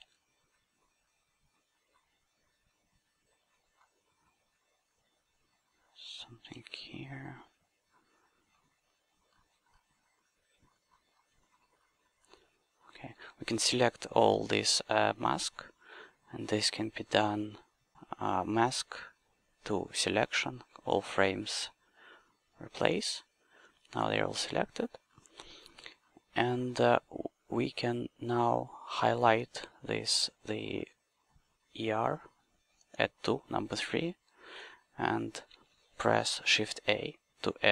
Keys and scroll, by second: 0.0 s, 6.6 s.